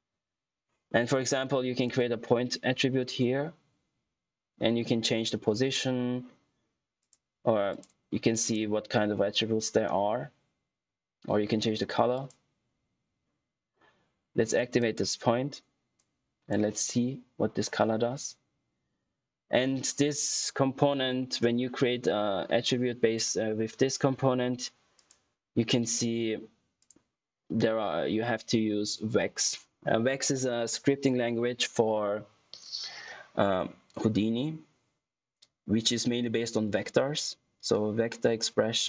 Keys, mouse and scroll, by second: 1.8 click, 6.9 click, 10.6 typing, 13.9 typing, 14.7 click, 24.9 click.